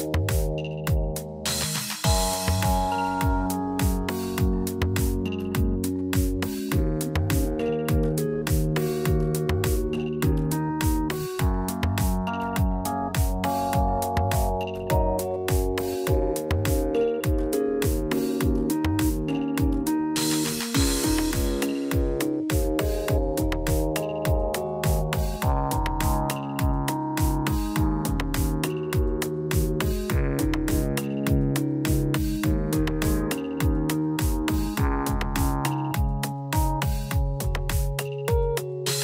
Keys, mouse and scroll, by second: 1.9 middle click, 4.5 ctrl+a, 6.7 middle click, 7.0 scroll up 2, 7.3 Tab, 7.5 middle click, 8.7 KP_Divide, 9.7 middle click, 10.1-10.6 scroll up 5, 10.6 shift+middle click, 11.0 middle click, 12.5 shift+middle click, 13.8 click, 14.3 middle click, 15.6 click, 16.3 shift+click, 17.7 j, 18.6 click, 19.5 shift+click, 20.4 j, 20.8 middle click, 21.8 shift+middle click, 22.6 click, 23.4 shift+click, 24.3 j, 24.7 middle click, 25.5 click, 26.3 shift+click, 27.3 j, 28.9 KP_Divide, 29.3 middle click, 30.3 Tab, 31.3 click, 32.1 Tab, 35.0 click, 35.7 click.